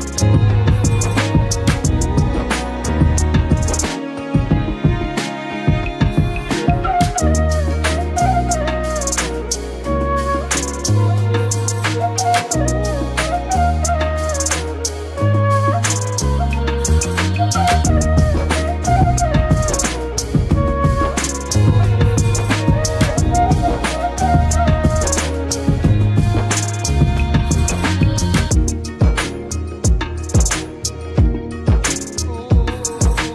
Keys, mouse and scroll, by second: 3.1 Delete, 5.3 Delete, 5.6 ctrl+d, 7.9 ctrl+d, 8.0 ctrl+=, 8.7 space, 8.8-9.4 click, 9.0 space, 10.4 click, 12.6 click, 15.5 Delete, 16.6 ctrl+d, 16.7 click, 18.4 Escape, 19.5 click, 22.5-23.2 scroll down 1, 23.3 click, 26.0-26.6 drag, 27.8 Escape, 28.7-31.6 drag.